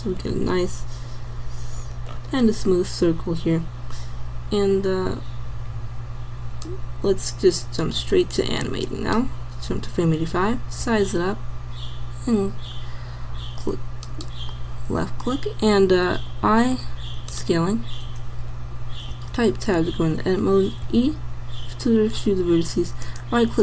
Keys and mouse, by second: 2.7-8.5 middle drag, 10.9 s, 16.3 i, 19.3 Tab, 20.9 e.